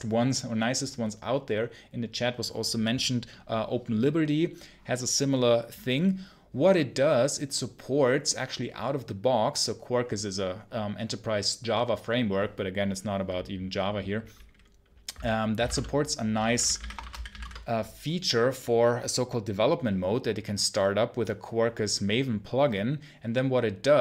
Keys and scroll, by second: 17.3 Return.